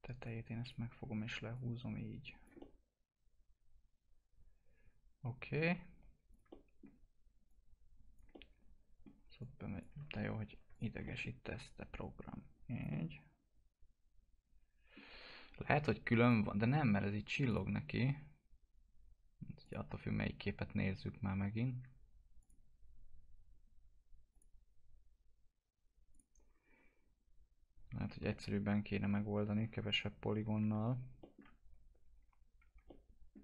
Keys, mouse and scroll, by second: 1.1 w, 1.5 click, 2.5-6.2 alt+middle drag, 6.2 click, 6.4 alt+middle click, 7.7 click, 8.3 alt+middle click, 9.3 click, 10.1 ctrl+z, 10.7 click, 11.9 click, 12.8 alt+middle click, 16.1 click, 22.3 click, 28.2-31.2 alt+middle drag, 32.6 1, 32.8 alt+middle click.